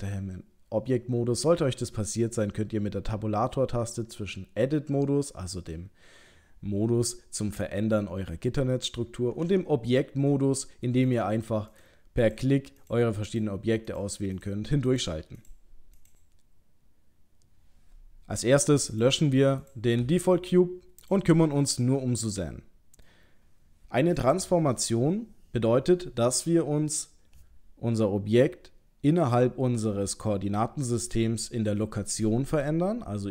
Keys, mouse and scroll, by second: 4.0 Tab, 9.4 Tab, 11.1 click, 11.6 click, 12.2 click, 12.8 click, 13.3 click, 13.9 click, 14.4 click, 14.9 click, 15.4 click, 16.0 click, 18.9 click, 19.6 click, 20.0 Delete, 21.0 click, 21.5 middle click.